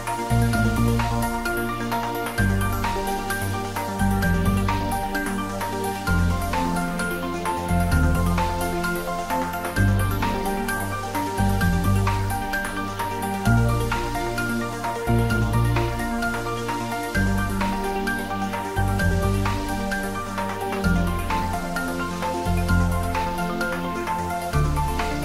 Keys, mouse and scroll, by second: 0.4 click, 0.7 scroll up 1, 1.3-2.2 middle drag, 2.8 click, 4.4 g, 5.7 x, 6.5 BackSpace, 8.1 click, 9.0 g, 9.3 z, 10.0 Up, 10.4 click, 11.1 scroll down 1, 13.1-14.1 typing, 14.7 click, 15.3 g, 15.6 x, 16.2 Down, 17.4 Right, 22.7 click, 23.4-24.4 typing, 25.1 click.